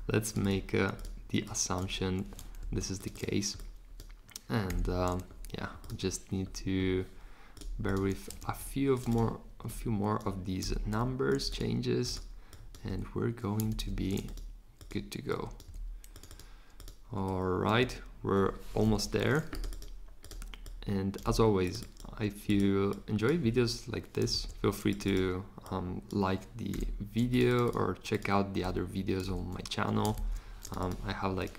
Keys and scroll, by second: 1.8 3, 2.6 super+z, 4.7 3, 8.4 super+z, 10.6 3, 12.9 3, 13.7 super+z, 17.8 3, 19.0 Return, 21.3 3, 24.3 super+z, 26.7 3, 29.3 3, 30.1 super+z.